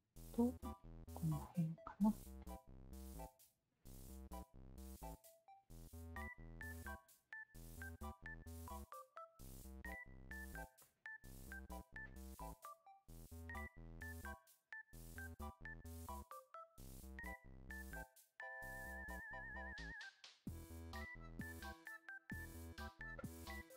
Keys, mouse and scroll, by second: 1.6 alt+click, 2.1 Tab, 2.4-2.9 alt+drag, 3.0 Tab, 3.3 alt+click, 3.7 alt+middle click, 4.1-5.5 alt+drag, 5.9 alt+click, 6.5 q, 6.7 alt+click, 8.3 r, 9.1-10.5 drag, 10.8 alt+click, 12.0 click, 12.4-13.7 alt+drag, 14.1 alt+click, 15.9 w, 16.4 alt+click, 17.4 alt+click, 17.7 alt+click, 19.4 alt+click, 20.5 alt+click, 21.5 alt+click, 22.2 alt+click, 23.1 alt+click, 23.4-23.7 alt+drag.